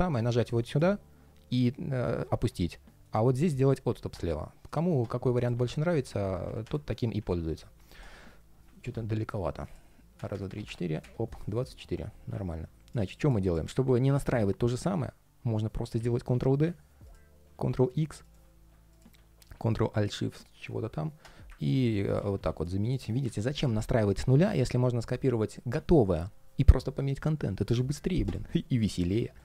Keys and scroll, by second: 8.5 super+z, 15.7 super+d, 17.2 super+x, 19.1 alt+shift+super+v, 21.6 super+c, 21.9 super+a, 22.0 shift+super+v, 28.3 ctrl+shift+3.